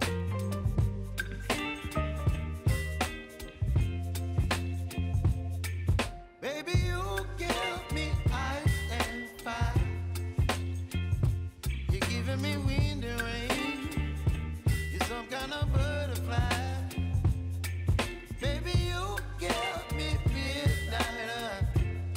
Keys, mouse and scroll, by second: 0.9 click, 2.6 y, 3.3-5.8 drag, 5.8 ctrl+v, 6.6 u, 7.6 click, 8.3 v, 8.7-10.1 drag, 10.1 scroll down 1, 10.6 space, 12.7 space, 13.3-16.6 drag, 17.3-17.8 scroll up 1, 18.3 space, 20.6 scroll up 1, 21.6 click.